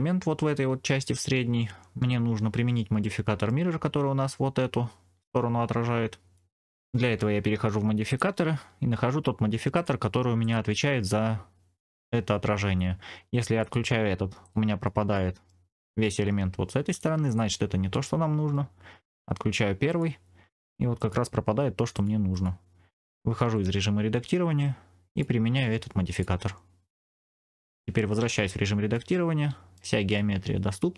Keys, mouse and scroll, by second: 2.9 middle click, 6.3 middle click, 6.6 Tab, 8.0 click, 9.6 click, 10.3 click, 13.5 click, 14.3 click, 14.7 middle click, 16.8 click, 17.2 click, 17.8 middle click, 19.8 click, 20.9 click, 21.8 click, 22.2 click, 23.3 Tab, 25.0-26.1 drag, 28.1 Tab, 28.8 middle click.